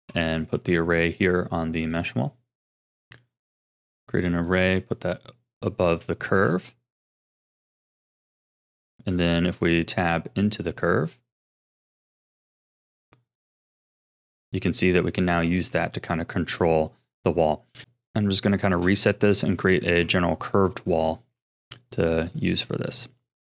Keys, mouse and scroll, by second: 0.3 Tab, 1.0 click, 1.8-5.2 drag, 6.0-6.4 shift+middle drag, 6.4-7.1 scroll down 4, 7.1 Tab, 8.4 click, 9.1 Tab, 9.6 click, 10.8 click, 11.5 Tab, 12.5 click, 13.4 click, 13.9 g, 15.8 r, 17.8 s, 18.4-19.1 scroll up 6, 19.1 shift+middle click, 19.6 click, 20.1 r, 20.9 click, 21.4 r, 22.9 click, 23.4 s.